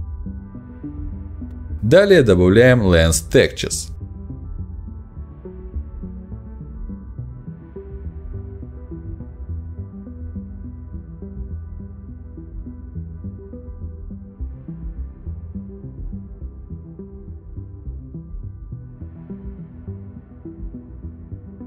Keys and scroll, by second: 1.5 Up, 10.3 ctrl+v, 11.3 ctrl+a, 11.5 ctrl+c, 14.2 ctrl+shift+v, 15.2 ctrl+t, 18.0 Return.